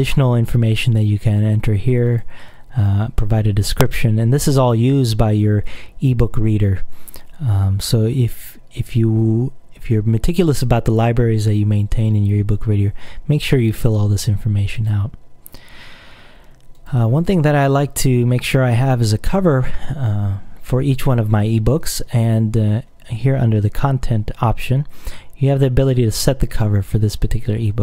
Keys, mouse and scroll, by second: 2.2 click, 14.9 click, 17.0 click.